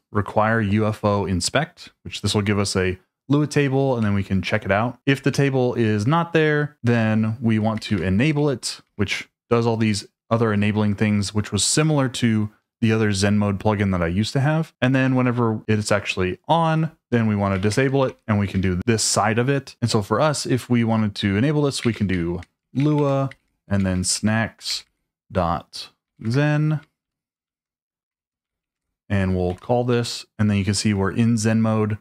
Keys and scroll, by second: 1.7 Escape, 4.1-8.5 typing, 8.8 Escape, 15.0 j, 15.3 j, 17.3-18.3 typing, 21.8-29.4 typing, 29.5 Return.